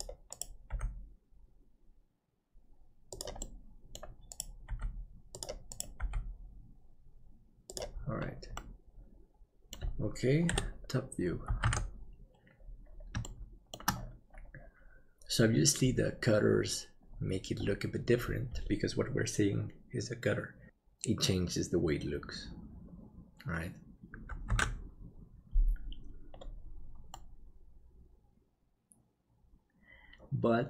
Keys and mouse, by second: 0.7 g, 3.5 middle click, 4.7 g, 6.0 g, 8.6-10.2 middle drag, 10.5 KP_7, 11.7 alt+a, 13.2 shift+middle click, 24.7 ctrl+s, 27.1-30.6 middle drag.